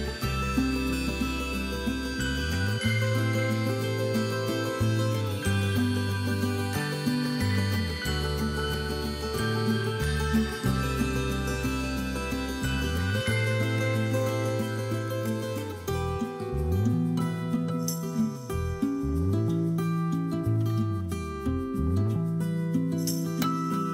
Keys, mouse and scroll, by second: 0.1 ctrl+z, 0.5 x, 1.3 scroll down 2, 2.3 scroll down 1, 2.6 scroll up 1, 3.4 scroll up 1, 3.8 middle click, 4.4 click, 4.6 scroll up 1, 4.8 click, 5.4 middle click, 5.6-6.6 ctrl+drag, 6.9 click, 7.4-10.2 middle drag, 10.2 click, 10.4-11.1 scroll down 2, 11.1-11.5 scroll up 2, 11.2 shift+middle click, 11.6 scroll down 1, 11.7 middle click, 12.2 middle click, 13.8 scroll up 1, 13.9 middle click, 14.2 scroll down 1, 14.3 middle click, 14.5 scroll up 1, 14.6 middle click, 15.6-16.1 middle drag, 15.6 scroll up 1, 16.1 click, 17.1 middle click, 18.3-19.3 shift+drag, 19.9-21.7 drag, 22.0 g, 23.4 click, 23.5 middle click.